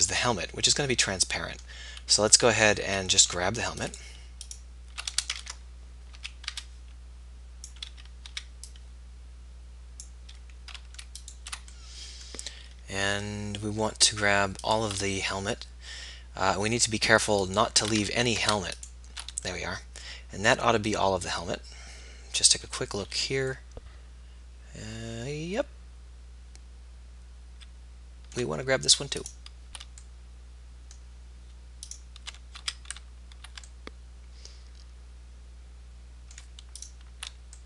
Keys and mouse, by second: 2.8 a, 5.5 ctrl+z, 5.5 click, 6.1 z, 6.5 b, 8.6 b, 12.2-16.5 middle drag, 18.1 ctrl+z, 22.7 z, 31.9 click, 32.6 z, 35.0 middle click, 36.9 click.